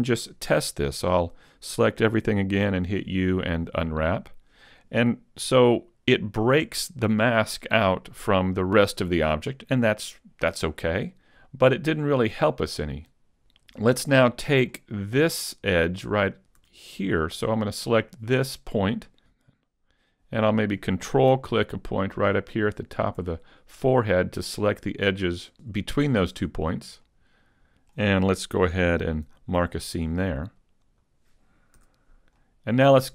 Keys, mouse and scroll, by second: 2.6 u, 12.4 middle click, 13.3 Tab, 14.1 shift+middle click, 14.7-16.4 scroll up 1, 16.4 scroll up 1, 16.6 a, 18.8 right click, 19.2 middle click, 22.8 ctrl+right click, 23.4 middle click, 27.1 middle click, 29.4 ctrl+e, 31.8 a, 32.4 middle click.